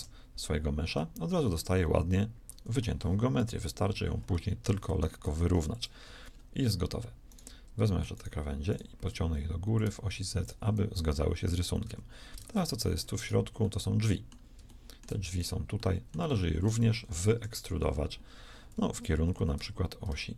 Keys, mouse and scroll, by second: 0.9-3.3 middle drag, 3.3 KP_1, 5.2 shift+s, 11.7 a, 12.3 ctrl+Tab, 16.3 z, 16.9 KP_1, 17.3 KP_3, 18.7 z, 19.5 e.